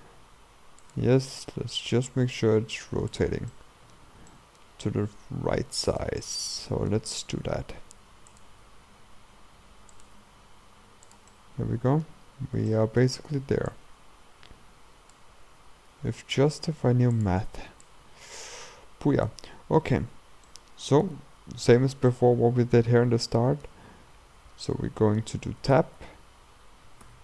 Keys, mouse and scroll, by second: 1.2 r, 3.5-5.3 middle drag, 5.3 s, 6.2-7.5 middle drag, 7.5 g, 8.7 r, 10.2 r, 11.3 middle click, 12.3-12.7 scroll up 2, 12.7 shift+middle click, 13.7-15.9 drag, 15.9 r, 17.9-20.5 drag, 20.5-22.9 middle drag, 22.9-23.3 scroll down 2, 23.3 middle click, 23.9-24.7 scroll up 4, 24.7 middle click, 25.6 Tab, 27.1 a.